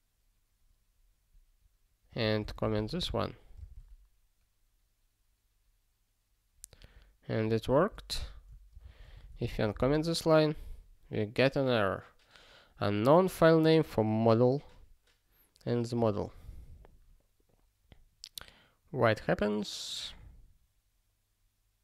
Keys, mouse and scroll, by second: 2.1 click, 2.4 ctrl+space, 2.4 ctrl+a, 2.7 alt+;, 3.0 ctrl+s, 8.2 super+o, 8.7 ctrl+space, 9.1 alt+;, 9.5 ctrl+s.